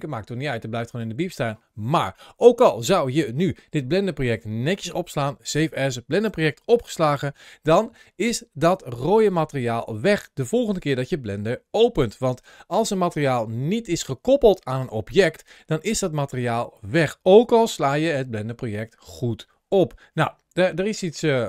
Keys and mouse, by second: 0.1 click.